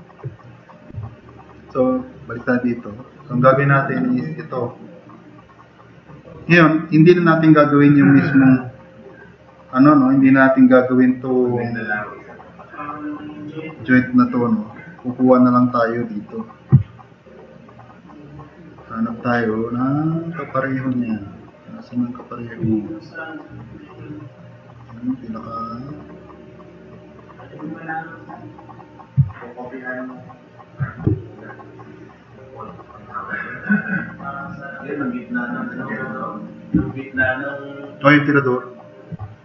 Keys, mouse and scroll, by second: 1.1 drag, 1.7-2.3 drag, 2.5 click, 18.5 click.